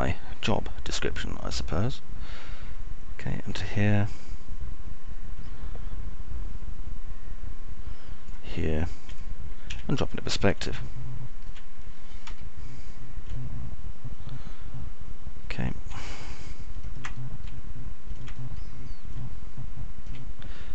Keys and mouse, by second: 0.0-5.1 shift+drag, 7.0-9.8 shift+drag, 11.5 p, 12.5-13.8 alt+middle drag, 14.5 F3, 15.0-17.6 alt+middle drag, 18.8 alt+middle click, 20.0 middle click.